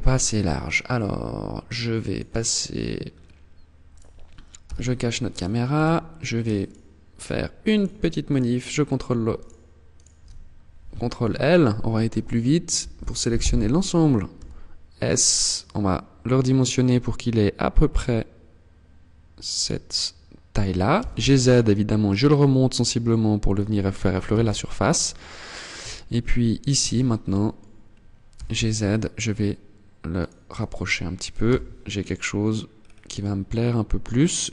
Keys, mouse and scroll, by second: 1.4 click, 2.4 scroll up 4, 3.3 right click, 4.0 h, 4.3 scroll up 1, 4.7 right click, 5.1 Tab, 6.0 alt+right click, 7.0 right click, 7.6 alt+right click, 8.7 alt+shift+right click, 9.3 alt+shift+right click, 12.1 ctrl+l, 13.7 s, 19.9 click, 20.3 g, 22.9 click, 23.6 z, 25.2 a, 26.1 b, 27.7 g, 29.7 click, 29.8 Tab, 30.8 z, 32.1-32.5 scroll down 3, 32.5-33.8 scroll up 4, 33.8 scroll up 1, 34.2 Tab.